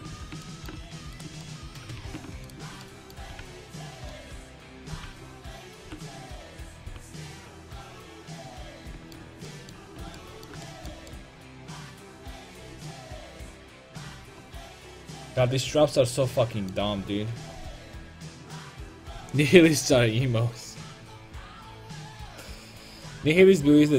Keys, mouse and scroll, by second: 0.2 ctrl+z, 2.0 ctrl+z, 3.4 g, 5.2 g, 5.9 r, 6.9 g, 10.0 Tab.